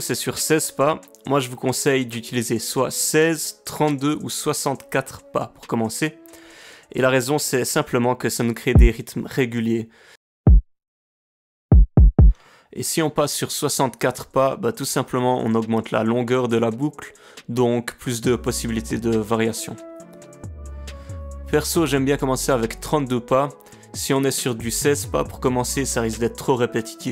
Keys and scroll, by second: 8.7 space.